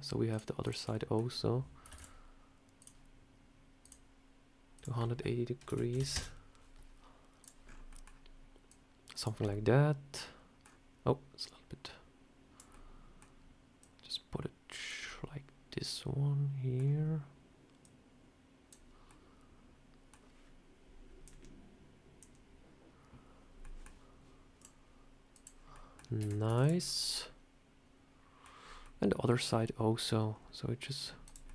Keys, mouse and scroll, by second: 0.2 shift+click, 0.6 shift+click, 0.8 middle click, 1.1 scroll down 4, 1.8 shift+d, 2.7 click, 4.6 click, 7.3 click, 7.5 scroll up 4, 7.8 middle click, 8.6 click, 9.3 scroll up 2, 9.4 middle click, 10.6 scroll down 3, 11.3 click, 12.6 middle click, 13.7 click, 14.9 middle click, 17.7 click, 19.0 middle click, 23.5 middle click, 24.5 click, 25.6 middle click, 26.1 Tab, 26.4 Tab, 26.5 click, 26.7-27.1 scroll down 4, 26.9 middle click, 28.5 scroll up 2, 28.7 middle click, 29.5 scroll down 1, 30.2 scroll up 3, 31.1 click, 31.4 middle click.